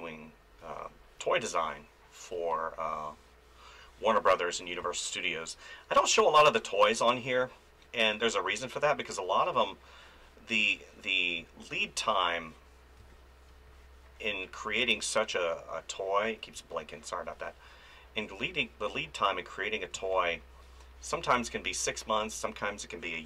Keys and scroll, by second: 2.3 space, 4.8 space, 10.5 space, 13.0 space, 16.2 f, 16.5 space, 19.9 space, 21.7 space.